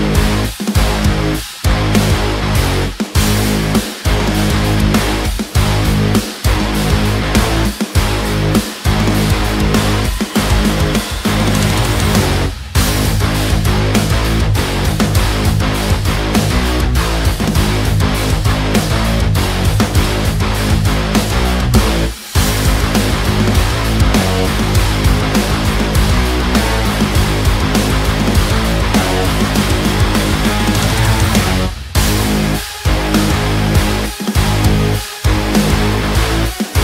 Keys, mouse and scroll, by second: 3.8-13.3 drag, 15.1 click, 20.1-22.5 drag, 22.8 click, 24.6 v, 25.2-29.0 drag, 29.0 ctrl+t, 29.5-33.9 drag, 36.6 click.